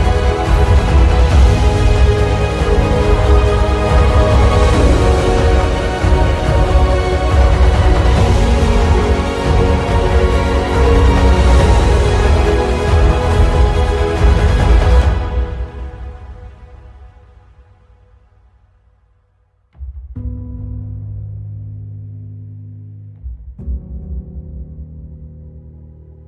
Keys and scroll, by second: 7.8 `, 23.0 alt+Return, 24.4 ctrl+i.